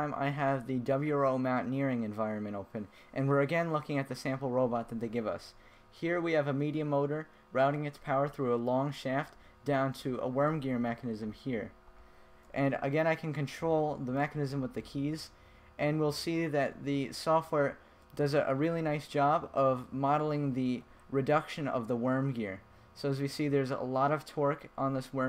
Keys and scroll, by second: 13.8 Left, 15.4 Right, 17.9 Left, 19.9 Right, 22.4 Left.